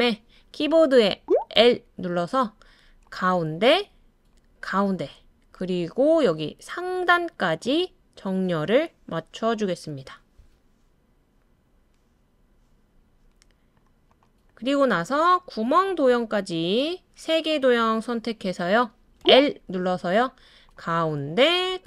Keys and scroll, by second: 1.2-1.6 typing, 19.2 typing.